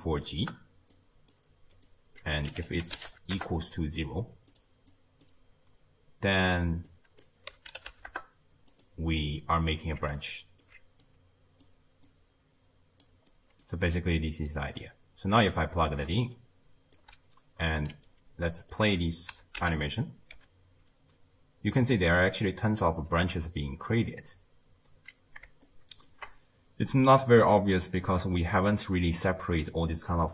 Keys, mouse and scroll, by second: 1.9 drag, 5.0 click, 6.9 drag, 10.1-11.0 alt+right drag, 11.0 click, 12.1 drag, 13.3-14.5 middle drag, 14.5 drag, 15.8 middle click, 16.1-20.3 typing, 16.3 right click, 18.0 right click, 22.0 space, 22.8-24.4 scroll down 2, 24.4-25.7 scroll down 1, 25.7-28.8 shift+middle drag, 28.8-29.2 scroll down 1, 29.2 middle click, 29.8-30.3 scroll down 3.